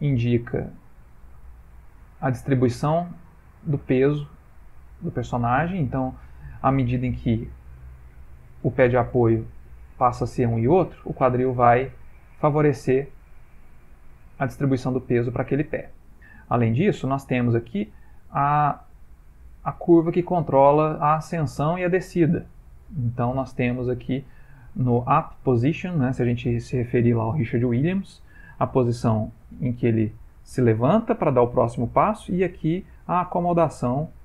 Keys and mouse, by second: 8.2 click, 17.1 click, 22.3 click, 32.3 click.